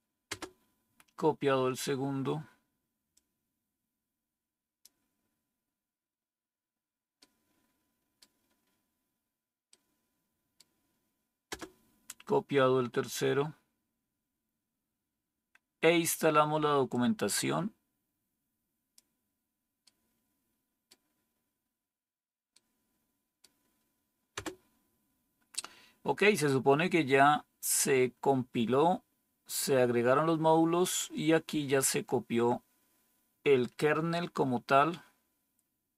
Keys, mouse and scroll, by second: 0.2 Return, 11.4 Return, 24.2 Return.